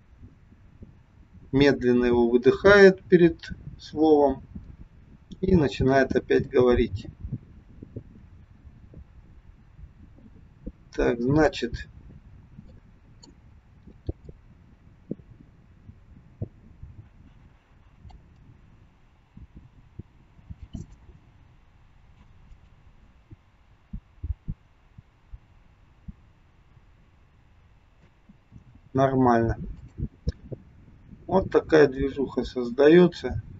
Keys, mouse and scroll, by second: 12.2-12.6 scroll down 3, 12.6 middle click, 14.4 click, 18.3 space, 20.7 click, 28.1 space, 29.8 click, 30.5 click.